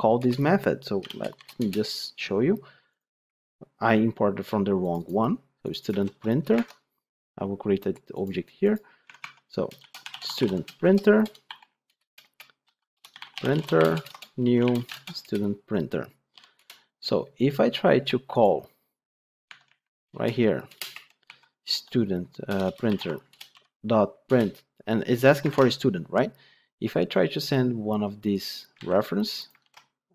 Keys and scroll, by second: 0.1 Return, 5.9 ctrl+c, 6.5 ctrl+Tab, 9.0 Tab, 11.7 Return, 14.8 Return, 23.2 Return, 25.4 ctrl+p, 28.7 ctrl+c.